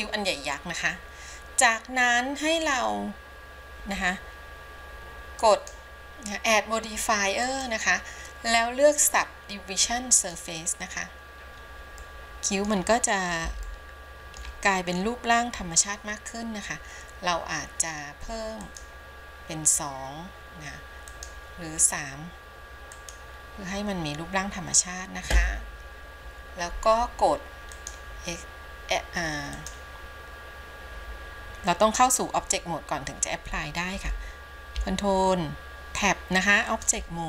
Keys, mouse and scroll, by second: 5.7 click, 7.6-10.6 drag, 12.2 middle click, 13.0-13.7 scroll up 1, 13.8 shift+middle click, 14.8 scroll up 1, 15.7 scroll down 1, 18.8 click, 21.2 click, 23.1 click, 27.9-29.8 drag, 34.9 ctrl+Tab.